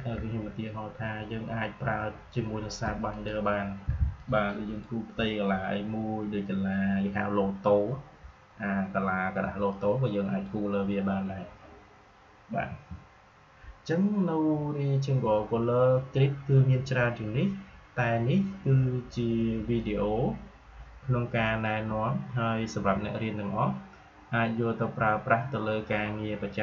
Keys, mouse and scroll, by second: 9.6-14.4 drag, 14.4 Delete, 19.5 space, 19.7 click, 19.9 space, 21.3 space.